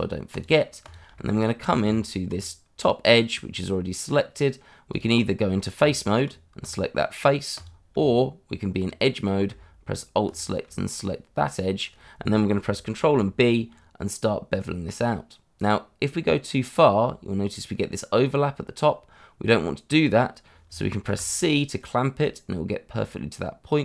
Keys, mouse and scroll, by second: 0.3 click, 1.2 middle click, 1.4 scroll up 1, 1.8 Tab, 3.2 scroll up 1, 3.9 middle click, 4.9 click, 5.7 Tab, 6.6 click, 7.9 Tab, 10.2 click, 11.1 middle click, 12.6 click, 12.9 ctrl+b, 21.1 c.